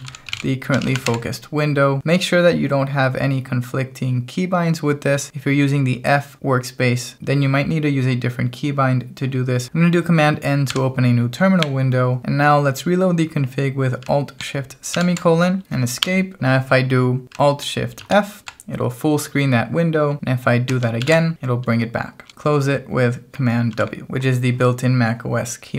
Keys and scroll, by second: 0.0-1.4 typing, 10.6 super+n, 14.9 alt+shift+;, 16.0 Escape, 17.9 alt+shift+f, 21.0 alt+shift+f, 23.7 super+w.